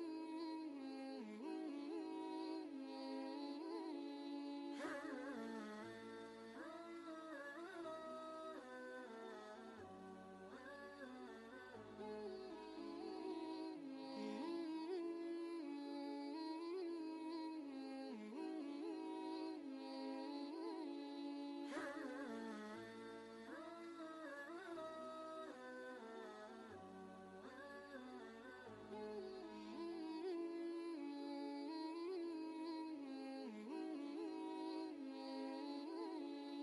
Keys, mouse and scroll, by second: 0.6 click, 2.3-5.3 alt+drag, 5.3 ctrl+space, 5.5 ctrl+click, 5.9 ctrl+space, 7.3 Down, 8.3 Right, 11.3 click, 12.5-14.6 alt+drag, 16.2 ctrl+z, 16.9 ctrl+space, 17.4 ctrl+space, 22.2 click, 26.0 click, 30.7 space, 30.9 ctrl+click, 31.3 ctrl+space, 33.3 ctrl+space, 33.5 ctrl+click, 33.8 ctrl+space.